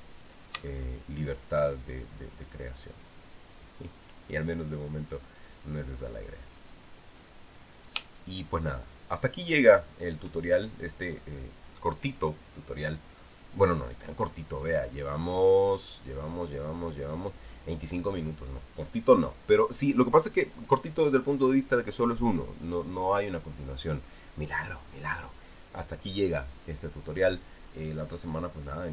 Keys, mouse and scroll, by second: 1.1 click, 4.4 shift+click, 8.6 shift+click, 10.5 shift+click, 15.6 click, 18.0 click.